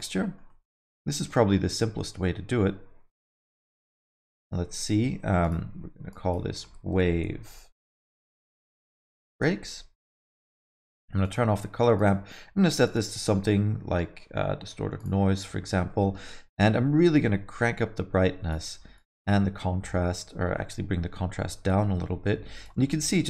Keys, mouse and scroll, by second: 0.2 middle click, 0.5 alt+middle click, 0.8 middle click, 3.2 click, 3.6 middle click, 3.9 alt+middle click, 5.4 click, 11.2 click, 12.0 click, 15.1 click, 15.3 middle click, 15.6 alt+middle click, 15.9 middle click, 17.1 click, 18.9 shift+click, 22.9 alt+middle click.